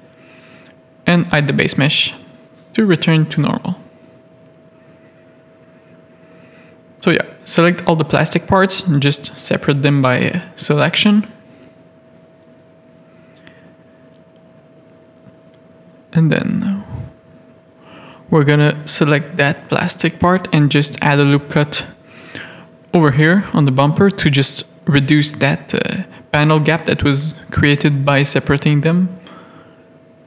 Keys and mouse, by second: 0.3 click, 1.3 click, 2.3 alt+a, 3.0 z, 3.9 click, 4.3 Tab, 7.5 Tab, 7.8 alt+a, 9.0 middle click, 9.6 z, 9.7-11.3 middle drag, 11.6 z, 11.7 middle click, 12.7 shift+middle click, 13.1 z, 14.4 alt+a, 16.0 shift+middle click, 16.6 middle click, 16.9 shift+middle click, 17.6 click, 18.3 Tab, 18.3 1, 18.9 ctrl+r, 20.8 Tab, 21.7 alt+a, 22.1 middle click, 22.8 shift+click, 23.1 middle click, 24.3 shift+click, 26.0 middle click, 28.5 middle click, 29.2 middle click, 29.8 Tab, 30.2 z.